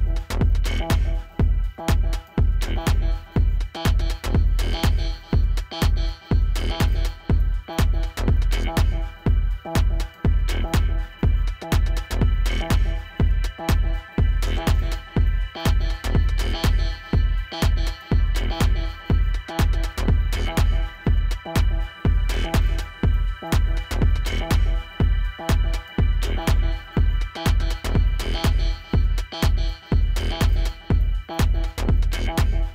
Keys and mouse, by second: 1.3 -, 2.0 ctrl+0, 2.8 click, 3.8 click, 4.9 click, 5.6 right click, 7.2 click, 16.3 click, 25.8 click, 30.7 click.